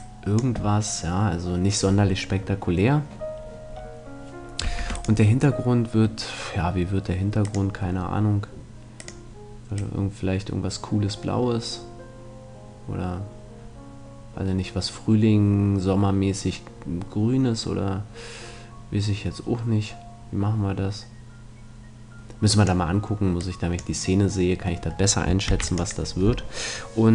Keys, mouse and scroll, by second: 3.4-4.8 middle drag, 4.8 Tab, 5.0-6.8 right drag, 7.4-10.8 drag, 25.5 ctrl+s.